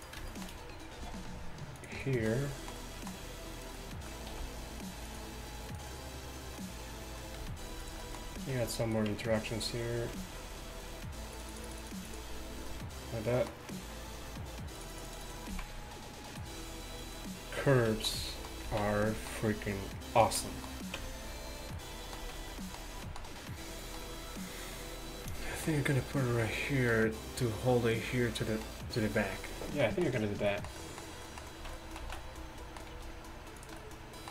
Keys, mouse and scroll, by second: 0.0 r, 1.1 e, 2.8 e, 4.4 r, 7.4 g, 8.6 Tab, 8.6 g, 9.2 Tab, 10.2 Tab, 13.5-17.2 drag, 15.6 z, 17.2-18.2 right drag, 18.2 middle click, 19.2 z, 20.1 z, 20.3 z, 21.1 Tab, 22.2 z, 31.6 z, 32.1 z, 33.0 g.